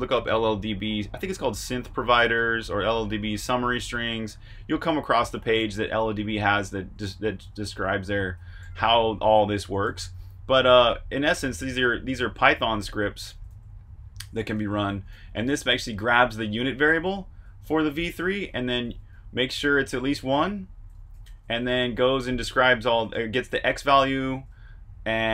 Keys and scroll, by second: 5.5 shift+v, 6.7-7.4 typing, 8.8-9.8 typing, 12.0 Escape, 12.3-12.9 typing, 14.2-16.1 typing, 17.9-20.7 typing, 22.3-24.7 typing.